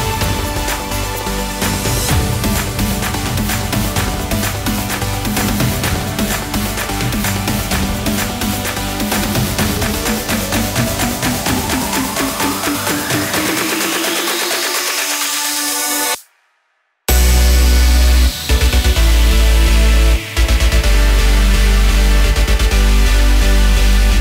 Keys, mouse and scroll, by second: 0.7 middle click, 2.7 click, 4.4 click, 6.9 a, 7.8 s, 8.6 ctrl+z, 9.1 click, 10.1-10.7 scroll down 8, 10.8 click, 12.1 s, 14.9 KP_0, 15.6 click, 16.9 middle click, 17.8 click, 18.5 KP_0, 19.4 click, 21.3 s, 23.0 middle click.